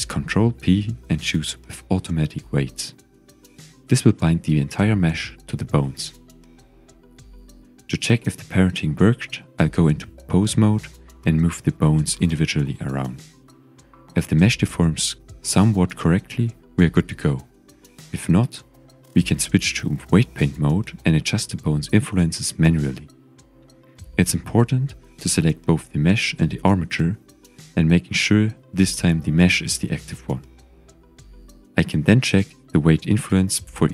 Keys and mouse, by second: 0.4 ctrl+p, 8.9 click, 9.9 Tab, 10.3 Tab, 11.8 click, 12.8 click, 13.3 g, 14.5 click, 15.0 g, 15.9 click, 16.7 g, 17.4 middle click, 18.0 click, 18.2 g, 19.0 middle click, 19.3 click, 19.5 g, 20.2 click, 22.4 typing, 23.9 Tab, 24.4 ctrl+Tab, 25.7 click, 26.6 click, 27.1 shift+click, 31.4-32.8 drag.